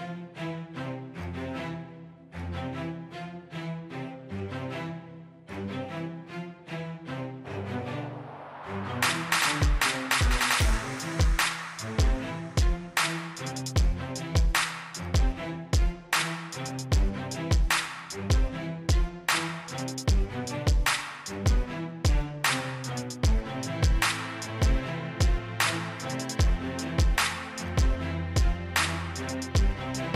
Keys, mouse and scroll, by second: 6.8-7.8 scroll up 1, 7.8-12.0 scroll down 1, 12.5-13.4 scroll up 1, 13.4-15.5 scroll down 1, 15.5-30.1 drag.